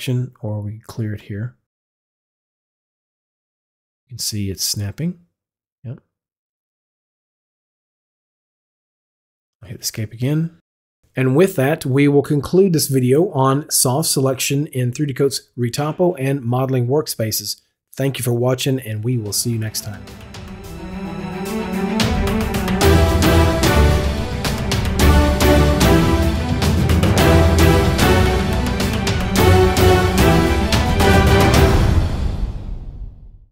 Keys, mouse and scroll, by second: 2.5 click, 6.2 click, 10.2 Escape.